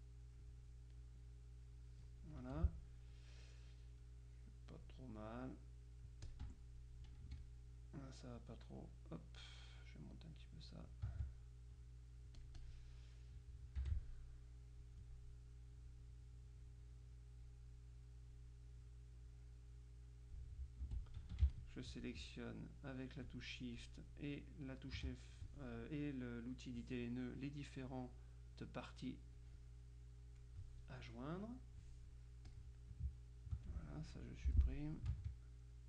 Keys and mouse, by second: 1.1-2.2 drag, 2.5 F2, 4.0-5.4 drag, 6.5 F1, 6.5 click, 7.3 F2, 7.4 click, 9.9 click, 11.2 ctrl+click, 12.5 click, 13.9 F6, 14.5 click, 15.8 click, 16.7-18.0 drag, 19.4-20.9 drag, 21.0 F2, 21.6 shift+click, 23.4 click, 29.4-31.0 drag, 31.7 click, 32.6 click, 33.8 ctrl+click, 34.6 Delete, 35.3 ctrl+click.